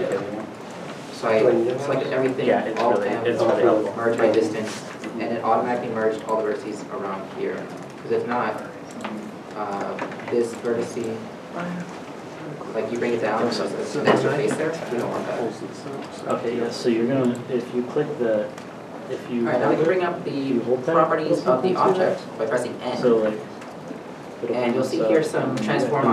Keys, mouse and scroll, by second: 0.9 shift+middle click, 0.9 scroll down 1, 2.0 a, 3.1 alt+m, 5.5 alt+m, 6.0 scroll up 1, 6.4 1, 7.3 g, 7.9 right click, 8.0 ctrl+z, 8.2 ctrl+z, 9.6 1, 9.9 g, 11.3 ., 11.7-12.2 scroll, 12.2 scroll down 1, 12.2 middle click, 12.6 g, 15.6 ctrl+z, 16.2 scroll down 1, 16.7 Tab, 17.0 scroll, 17.0-17.5 scroll down 1, 21.5 scroll, 21.5 n, 22.4 n.